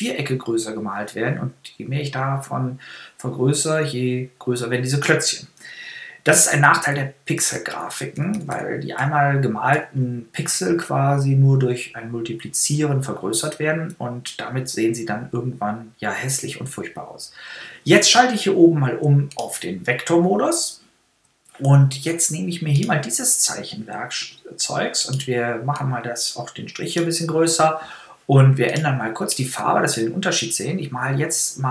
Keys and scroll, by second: 6.1 super+-.